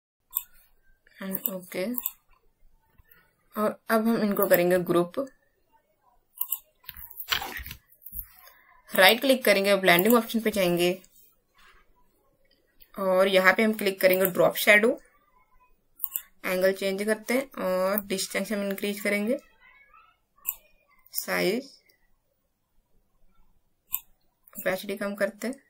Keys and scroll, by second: 7.5 ctrl+shift+g.